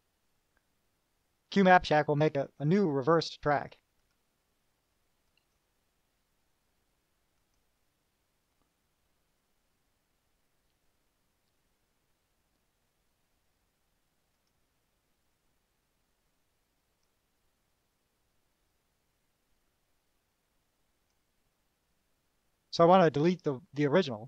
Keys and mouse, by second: 4.2 click, 5.5 click, 7.6 click, 14.7 click, 15.5-17.4 drag, 19.1-21.5 drag.